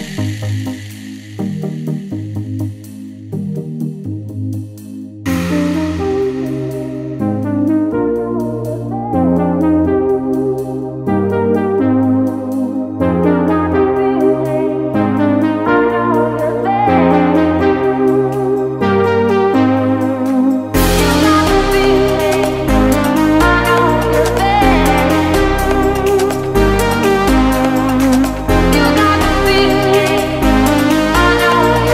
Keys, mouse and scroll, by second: 0.5 alt+Tab, 1.4 click, 4.3 click, 4.5 Left, 6.4-6.8 shift+click, 7.0 Return, 7.2-7.8 scroll up 1, 8.0 click, 9.6 click, 11.0 ctrl+Num_Lock, 12.0-12.4 click, 13.1-13.6 click, 14.8 Return, 15.4-15.8 alt+scroll up 2, 15.8 alt+scroll down 1, 16.2 scroll up 1, 16.9 click, 17.1 Delete, 17.4 click, 27.8-28.3 scroll down 1, 28.3 scroll up 1, 28.5 click, 28.7 right click, 29.0 click, 29.5 Down, 30.0-30.4 scroll up 1, 30.4 Return, 30.5 scroll up 1, 30.7 click, 30.9 scroll down 1, 31.2 alt+Tab, 31.6 alt+click.